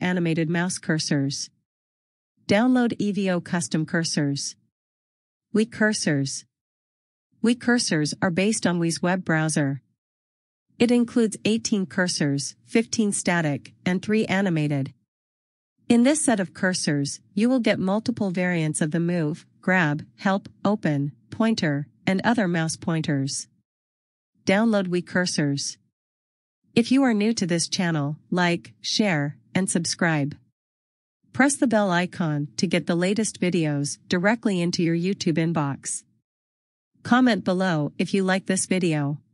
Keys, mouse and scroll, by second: 5.1 click, 13.6 scroll down 1, 14.3 scroll up 1, 15.9 click, 20.3 click, 28.0 scroll up 1, 34.1 click, 38.8-39.3 scroll up 1.